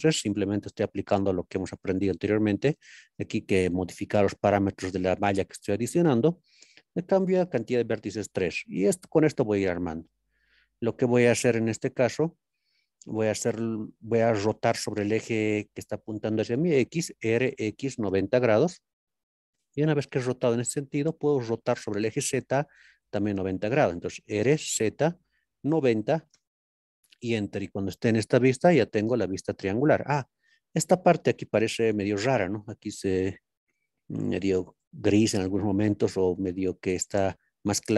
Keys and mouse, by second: 7.7 click, 11.6 ctrl+KP_3, 13.0 middle click, 17.9 KP_9, 18.1 KP_0, 18.6 KP_Enter, 25.5 KP_9, 25.7 KP_0, 26.3 KP_Enter, 27.7-28.5 middle drag, 30.6-31.1 middle drag, 34.4-35.4 middle drag, 36.1 middle click.